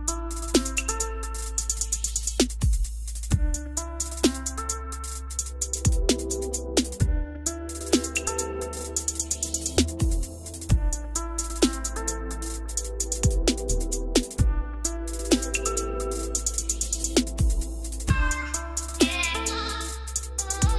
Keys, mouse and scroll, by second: 2.1 BackSpace, 2.6-4.8 BackSpace, 4.8 0, 7.0-7.7 typing, 7.7-8.5 scroll down 7, 8.5-9.0 scroll up 4, 9.4 click, 10.3 click, 10.4 o, 12.1 click, 12.4 middle click, 12.5 middle click, 14.1 click, 14.9 m, 16.3 click, 19.5-20.4 typing.